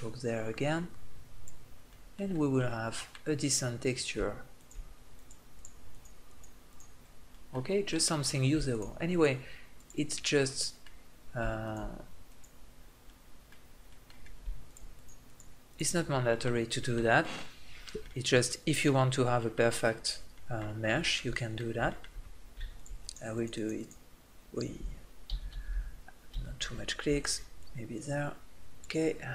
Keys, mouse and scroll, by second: 1.5-3.6 middle drag, 4.3-7.3 drag, 7.3-8.4 middle drag, 8.5-13.6 middle drag, 13.6 click, 13.8 middle click, 14.4-15.8 drag, 15.9 middle click, 16.0-17.4 drag, 17.4 middle click, 20.3 middle click, 22.5-24.4 drag, 25.1 ctrl+z, 25.2 ctrl+z, 25.5 ctrl+z, 26.1 ctrl+z.